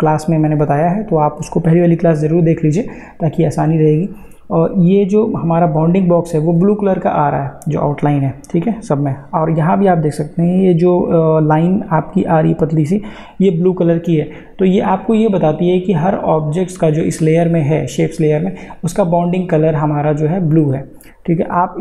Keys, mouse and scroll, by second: 7.1 click, 15.5 click, 18.6 click.